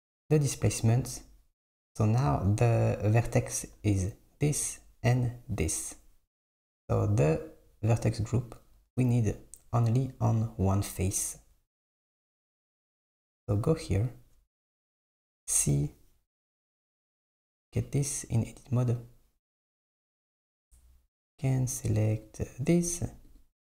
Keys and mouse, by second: 1.4 Tab, 6.8-7.8 drag, 8.5 click, 9.1 KP_7, 12.1 click, 14.8 c.